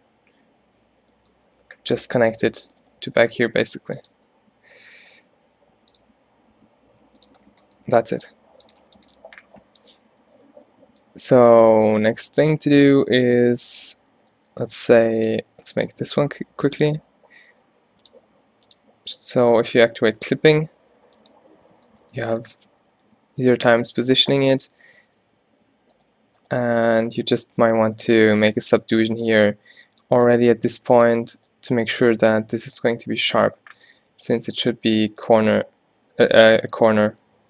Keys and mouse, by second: 2.6 g, 3.2 g, 3.5 middle click, 3.6-5.1 drag, 4.2 e, 6.1 e, 7.5 click, 9.3 z, 12.1 a, 12.5 a, 14.0-15.3 drag, 14.4 shift+d, 15.7 z, 16.2 e, 17.0 e, 18.8-21.1 drag, 20.3 g, 23.1 g, 24.1 z, 24.9 middle click, 25.1 middle click, 25.3 a, 25.5 a, 28.3 alt+w, 28.8 g, 29.6 g, 30.4 g, 31.6 g, 32.2 z, 32.8 Tab, 33.2 Tab, 33.9 Tab, 34.1 Tab, 34.4 g, 35.4 Tab.